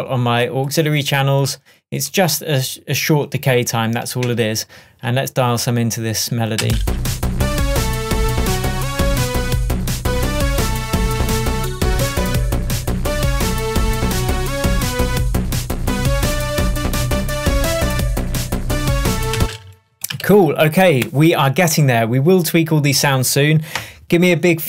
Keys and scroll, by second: 4.3 Tab, 6.7 space, 19.4 space.